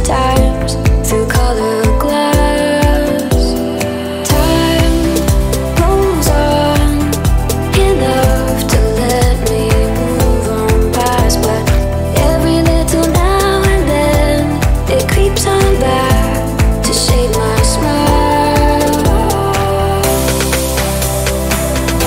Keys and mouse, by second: 13.5 middle click, 14.1 click, 15.0-16.0 drag, 16.3-21.5 drag, 21.5 shift+d.